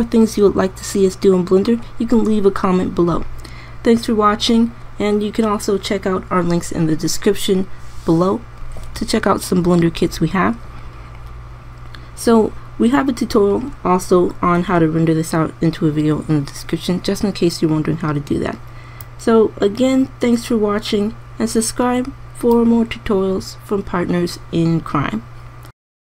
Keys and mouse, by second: 21.4 middle click.